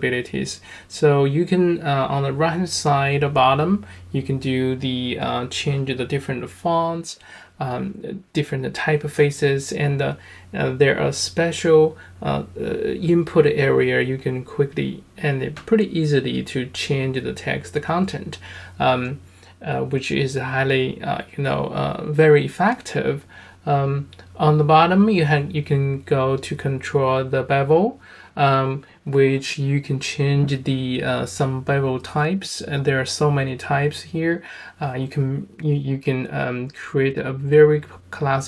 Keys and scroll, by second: 7.4-11.2 typing, 33.4 space.